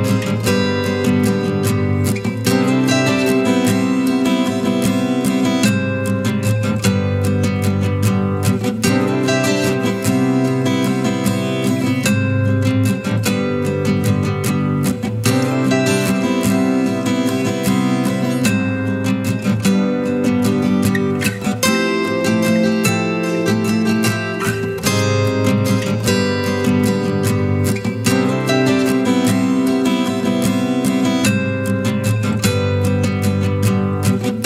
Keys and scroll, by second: 4.2 ctrl+t.